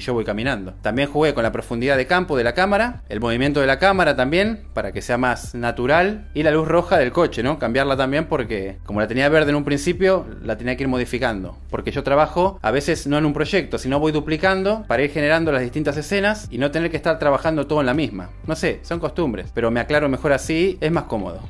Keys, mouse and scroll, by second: 12.6-16.0 drag, 16.0 space.